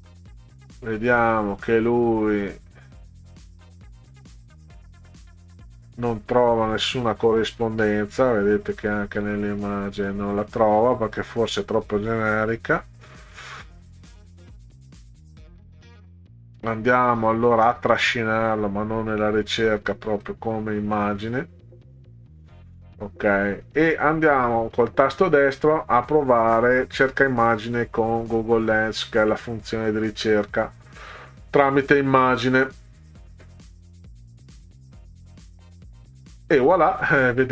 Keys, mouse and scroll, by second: 5.7 scroll down 2, 6.8 scroll down 2, 8.5 scroll down 2, 10.4-11.0 scroll up 4, 11.6 click, 14.9 click, 18.5 click, 19.2 click, 20.3 click, 24.2 right click, 29.2 click.